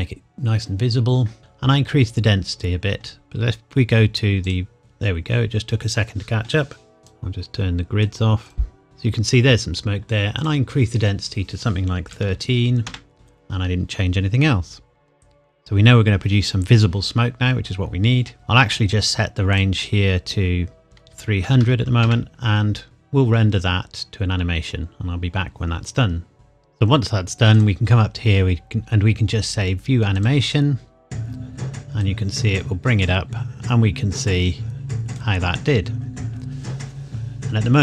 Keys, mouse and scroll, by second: 4.4 click, 4.8-5.4 scroll up 1, 7.0 click, 10.4 click, 12.1 KP_1, 12.3 KP_3, 12.9 KP_Enter, 13.1 shift+middle click, 18.3 click, 19.5 click, 21.1 KP_3, 21.4 KP_0, 22.0 KP_Enter, 22.8 click, 26.3 click, 27.6 click.